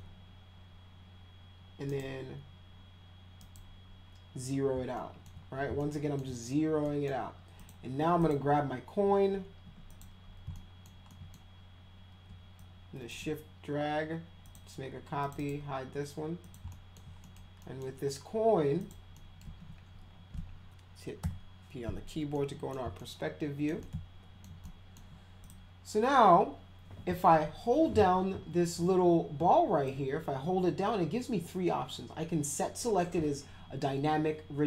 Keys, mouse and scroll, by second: 1.9 right click, 3.4 right click, 5.0 alt+middle click, 5.8 alt+middle click, 6.8 middle drag, 7.6 click, 8.2 click, 9.6 w, 9.9 click, 10.5 alt+middle click, 11.1 alt+middle click, 12.6 shift+click, 14.4 click, 15.2 click, 15.4 right click, 16.4 click, 16.7 alt+middle click, 17.2 middle click, 17.6 middle drag, 18.8 click, 19.1 middle click, 21.2 p, 22.4 middle click, 23.0 alt+middle click, 23.8 alt+middle click, 24.7 alt+middle click, 25.4 click, 29.9-34.6 drag.